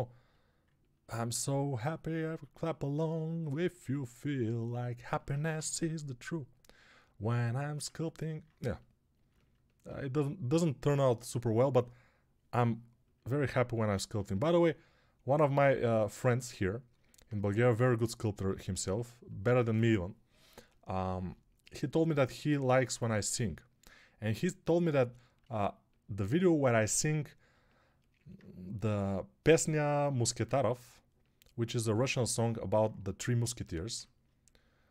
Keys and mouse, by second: 5.4 g.